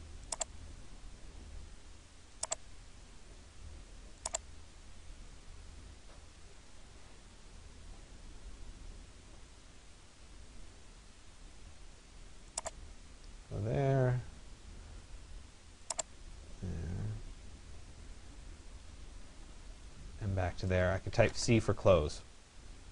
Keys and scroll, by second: 21.0 Return.